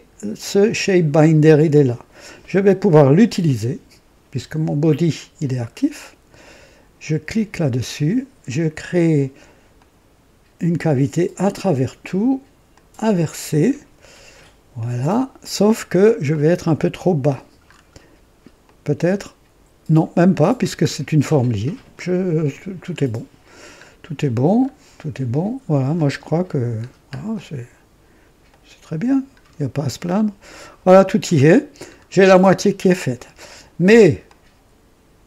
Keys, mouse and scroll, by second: 0.3 click, 7.1 click, 9.7 click, 10.8 click, 12.6 click, 15.3 click, 16.2-17.4 drag, 17.6 scroll up 1, 18.6-20.1 drag, 22.9 scroll down 1, 23.4-23.8 scroll down 1, 24.5 scroll up 1, 25.9 click, 26.8 scroll down 1, 27.3-28.2 drag, 28.4 right click, 29.3-29.6 scroll down 1, 30.0 click, 31.0-31.7 right drag, 31.8 scroll down 1, 32.8-33.7 drag, 34.2-35.2 drag.